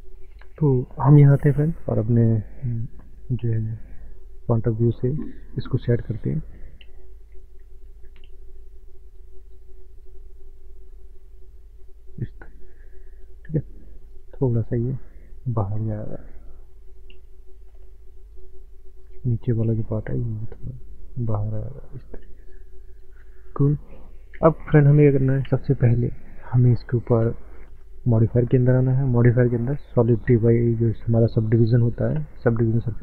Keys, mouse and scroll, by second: 1.4 KP_Decimal, 2.5 middle click, 2.8-3.1 scroll down 6, 3.8-4.3 scroll down 15, 4.2 middle click, 4.3 middle click, 4.8-5.4 scroll up 3, 5.6 middle click, 6.6 shift+middle click, 7.1 shift+middle click, 7.8 shift+middle click, 7.9 shift+middle click, 8.4 click, 9.4 click, 10.0 click, 11.0 middle click, 11.1 middle click, 12.5 click, 14.2 click, 16.8 middle click, 16.8 middle click, 17.2 scroll down 4, 17.3 middle click, 17.4 middle click, 18.4 click, 18.4 click, 19.1 click, 19.5 middle click, 19.6 middle click, 20.4 click, 21.0-23.2 drag, 23.2 middle click, 25.5 Tab, 26.0 middle click, 28.4 click, 30.2 click, 31.0 click, 31.4 click.